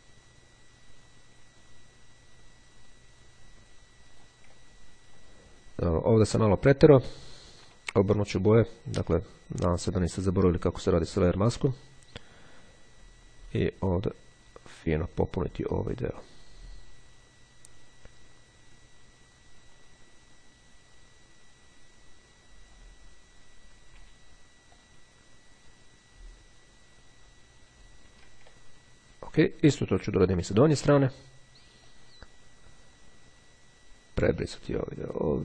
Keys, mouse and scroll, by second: 4.6 ctrl+click, 4.8-5.3 ctrl+scroll down 2, 8.0 click, 9.6-23.4 drag, 24.1 x, 24.9-28.5 drag, 28.7-29.0 ctrl+scroll down 2, 29.0 click, 31.0 x, 32.0-35.4 drag.